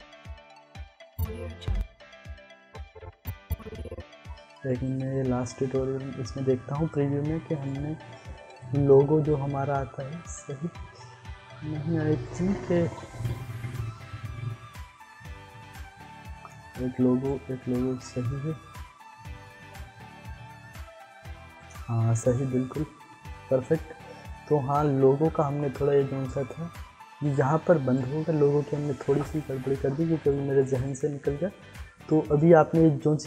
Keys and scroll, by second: 1.1 space.